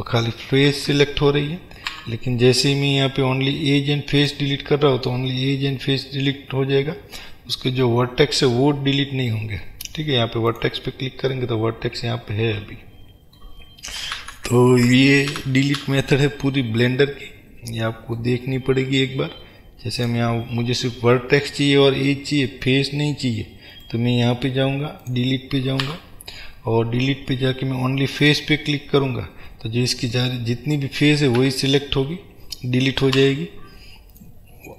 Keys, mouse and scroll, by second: 0.7 ctrl+z, 10.7 click, 11.4-20.1 middle drag, 14.3 ctrl+z, 20.1 click, 20.9-23.9 middle drag, 23.9-25.1 right drag, 25.1 click, 25.9 Delete, 29.6 middle click, 30.5 scroll down 1, 30.8 middle click, 31.5 a, 31.9-34.7 middle drag, 33.3 Delete.